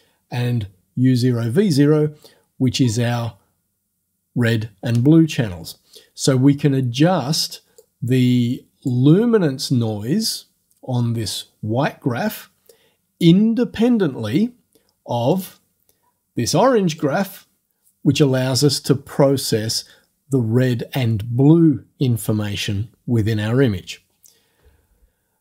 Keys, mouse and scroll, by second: 7.8-9.1 drag, 15.4 click, 17.0 click.